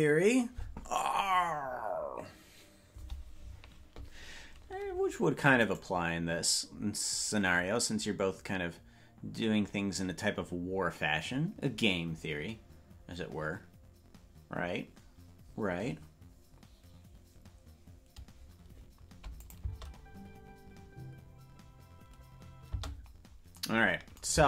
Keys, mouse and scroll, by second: 6.0 right click, 19.3 click, 22.6 space.